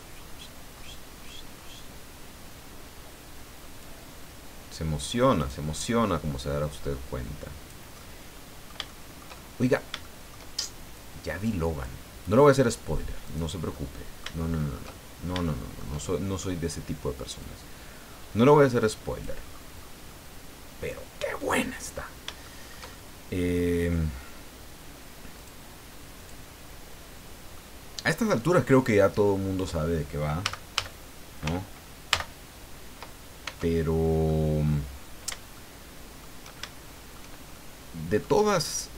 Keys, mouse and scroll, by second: 0.7-1.8 scroll up 3, 5.4 right click, 6.6-7.9 drag, 8.0-9.9 middle drag, 10.0 shift+middle click, 10.9 click, 13.2 right click, 13.5-16.0 middle drag, 17.4-19.4 drag, 19.5-20.0 scroll down 1, 20.1-21.4 middle drag, 21.5-22.2 scroll up 2, 22.4 shift+middle click, 22.5-22.9 shift+scroll up 1, 22.9-24.1 shift+middle drag, 25.3 click, 26.2 click, 26.7-27.0 scroll down 1, 27.5 middle click, 28.6-29.0 scroll up 1, 30.4 a, 32.1 ctrl+n, 33.4 ctrl+Tab, 34.3 middle click, 34.9-35.4 scroll up 3, 35.5 shift+middle click, 36.6 shift+middle click, 37.5 shift+middle click, 38.6 right click.